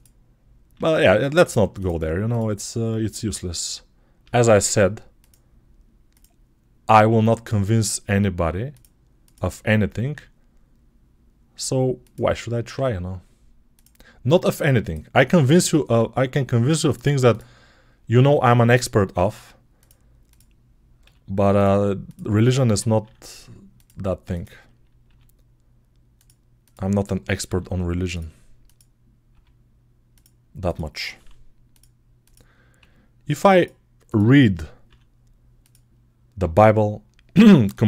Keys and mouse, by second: 0.6 g, 4.0 e, 6.0 click, 6.8 g, 8.3 middle click, 9.1 click, 9.2-21.9 middle drag, 10.0 e, 12.6 s, 15.7 f, 18.0 e, 20.9 g, 21.9 click, 22.8 e, 24.2 click, 24.9 g, 25.3-28.5 middle drag, 27.3 e, 28.5 click, 28.6-30.5 middle drag, 29.2 g, 30.5 click, 30.6-32.1 middle drag, 31.0 e, 32.1 click, 32.2 middle click, 32.6 g, 33.9 click, 34.7 e, 36.2 s, 36.4-37.8 middle drag.